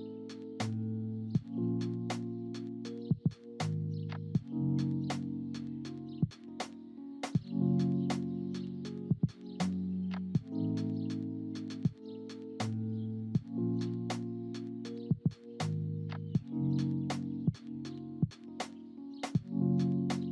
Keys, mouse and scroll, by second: 0.6 space, 3.3 ctrl+z, 3.6 ctrl+z, 4.0 ctrl+z, 4.1 ctrl+z, 5.4 click, 7.1 click, 7.8 click, 11.5-13.7 drag, 15.7 click, 16.9-20.3 drag.